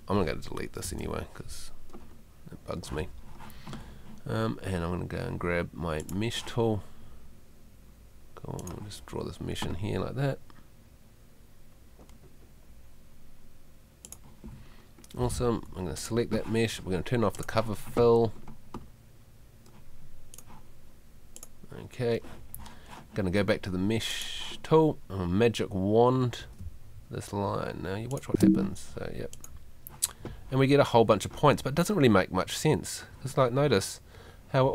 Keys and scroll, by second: 0.8 BackSpace, 15.5 Escape, 26.6 space.